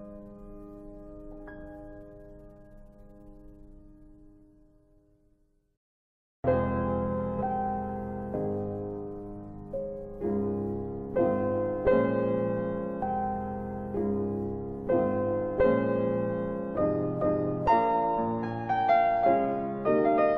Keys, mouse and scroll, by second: 1.1 click, 3.6 middle click, 6.2 click, 7.9 middle click, 9.3 middle click, 14.0 click, 14.0 scroll down 1, 15.8 Delete, 16.4 middle click, 16.8 scroll up 3.